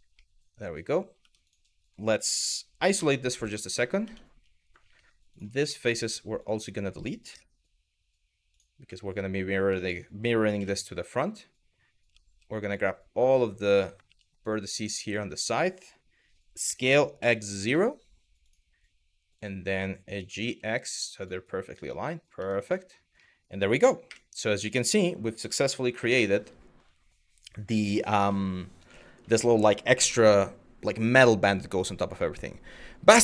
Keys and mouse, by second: 0.8 Tab, 1.1 click, 2.6 KP_Divide, 3.3 middle drag, 3.7 Tab, 4.5 3, 5.3 shift+middle click, 6.9 Delete, 8.6 middle click, 9.5 shift+middle click, 10.2 KP_1, 11.7 z, 12.4 click, 13.7 1, 14.1 click, 16.3 s, 17.2 x, 17.2 KP_0, 18.1 click, 19.0 click, 19.8 g, 20.1 x, 20.8 click, 21.6 middle click, 22.0 Tab, 22.3 middle drag, 22.8-23.2 middle drag, 23.7 KP_1, 25.1-25.5 middle drag, 25.7-26.1 middle drag, 28.0-28.9 middle drag.